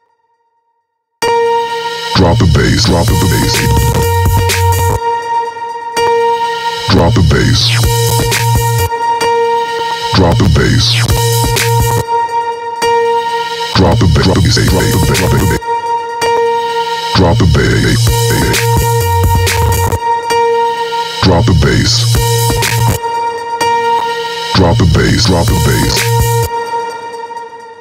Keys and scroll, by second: 0.6 space, 4.5 space, 8.4 space, 12.4 space, 15.6 space, 20.7 space, 22.6 space, 25.8 space.